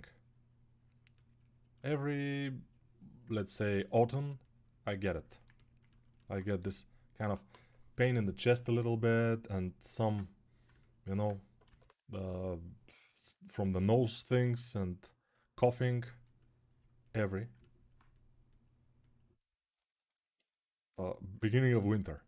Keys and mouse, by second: 6.4 g, 11.4 g, 13.6 g, 14.0 ], 14.2 ], 14.3 ].